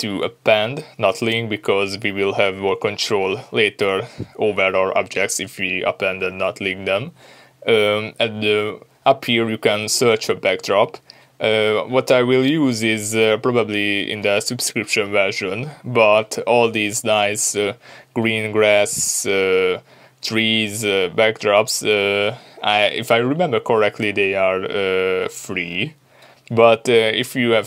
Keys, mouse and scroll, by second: 0.6-3.9 drag, 4.1 Return, 6.2-27.6 drag, 6.9 Return.